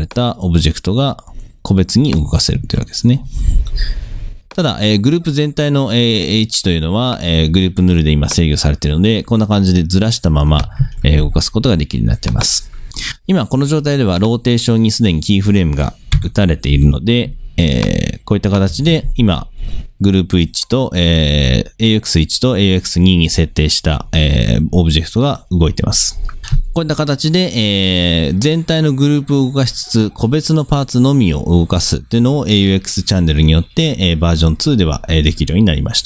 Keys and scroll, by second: 2.6 super+z, 10.9 super+z, 16.2 u, 18.8 space.